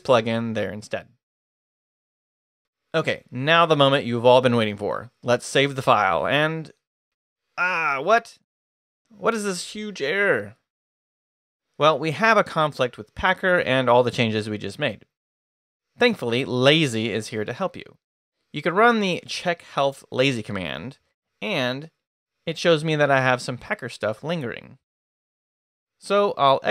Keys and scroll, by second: 0.0 Up, 0.2-2.4 typing, 5.3 Escape, 5.7-6.6 typing, 18.3-22.0 typing, 25.5 Return, 26.1 Escape, 26.3-26.7 typing.